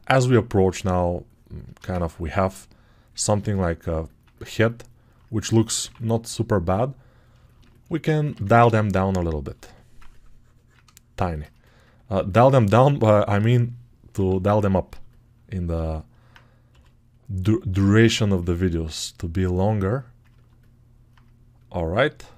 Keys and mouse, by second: 5.7 6, 7.9 right click, 8.2-9.5 ctrl+drag, 8.2 1, 9.7-11.2 alt+drag, 11.4-12.4 alt+drag, 14.0-15.7 drag, 14.0 6, 15.9 alt+click, 16.6 g, 18.2-22.3 ctrl+alt+drag.